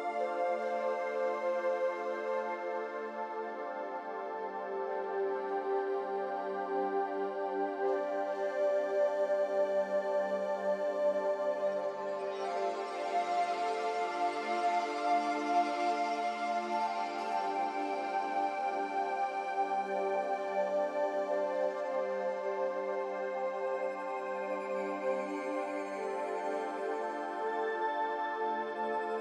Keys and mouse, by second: 0.6 shift+click, 2.1 click, 5.3 ctrl+z, 7.1 2, 7.4 click, 9.6 click, 19.8 3, 20.3 click, 21.1 shift+click, 21.7 shift+click, 22.4 shift+click, 24.3-25.2 drag, 26.6 click, 27.0 click.